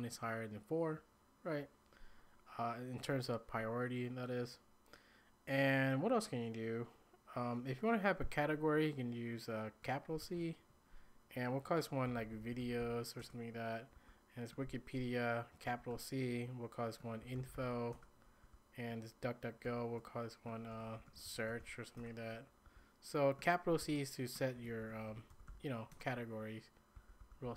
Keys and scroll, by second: 10.2 shift+c, 11.8-14.0 typing, 15.4-22.7 typing, 23.8-27.5 typing.